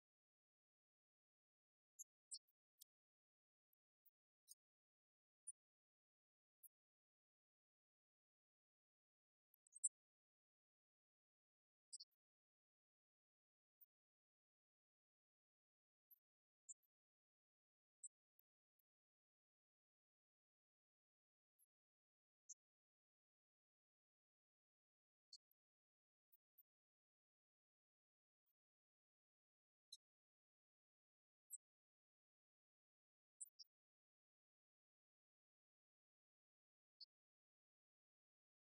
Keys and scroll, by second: 0.0-1.8 typing, 3.1 BackSpace, 4.8-6.6 typing, 9.4-12.2 typing, 37.5-38.7 typing.